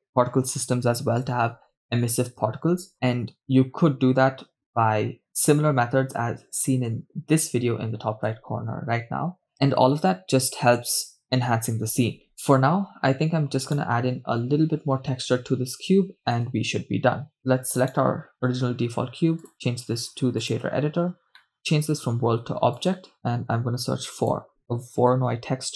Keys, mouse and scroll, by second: 12.3 shift+space, 14.8 right click, 17.8 KP_0, 18.7 right click, 19.5-20.7 drag, 21.5 middle click, 21.6-23.1 drag, 23.7 KP_0, 23.7 shift+a.